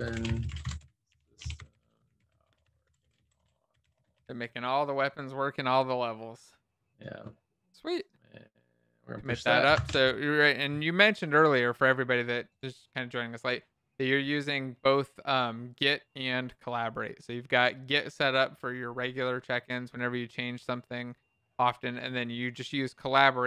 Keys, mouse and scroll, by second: 1.9-2.6 typing.